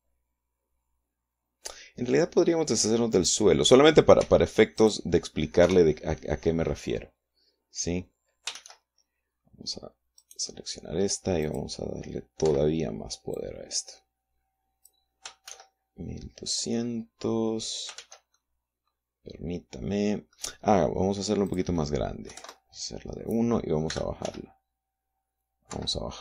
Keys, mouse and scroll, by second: 3.7 right click, 4.7 x, 5.3 click, 6.2 KP_0, 9.1 shift+z, 10.7 right click, 12.0 click, 13.0 Escape, 13.9-15.6 drag, 16.0 shift+z, 18.5 shift+z, 18.9-21.1 shift+middle drag, 22.0 click, 22.9 KP_1, 24.5 r, 24.8 z.